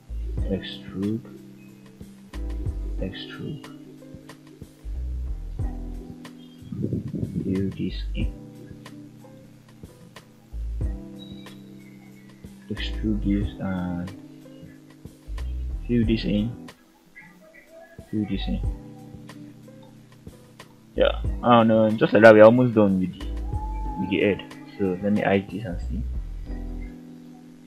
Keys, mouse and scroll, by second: 0.5 click, 1.0 r, 2.0 click, 2.4 e, 4.8 click, 5.7 click, 6.5 shift+click, 7.3 f, 9.4 click, 10.6 ctrl+right click, 11.7 ctrl+z, 12.6 e, 13.3 click, 14.1 shift+click, 15.0 ctrl+click, 16.1 f, 16.5 click, 17.3 shift+click, 18.0 f, 18.5-19.4 scroll down 3, 18.9-19.4 middle drag, 19.6 scroll up 1, 20.0-20.3 shift+middle drag, 20.6-21.1 middle drag, 21.4 scroll down 2, 21.8 shift+middle click, 22.2-23.6 middle drag, 23.8 scroll up 2, 24.3 Tab, 25.0 click, 25.4 h, 25.8-27.6 middle drag.